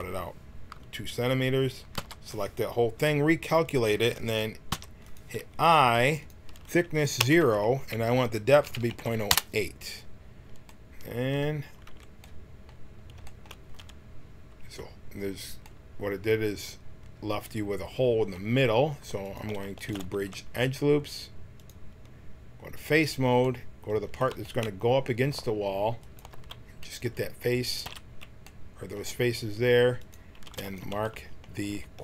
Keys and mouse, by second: 1.9 l, 3.5-5.3 drag, 4.7 i, 6.3-8.1 drag, 10.7-11.8 middle drag, 11.8 t, 19.2 click, 20.1 w, 22.7-27.7 drag, 27.7 x, 29.9-32.0 drag.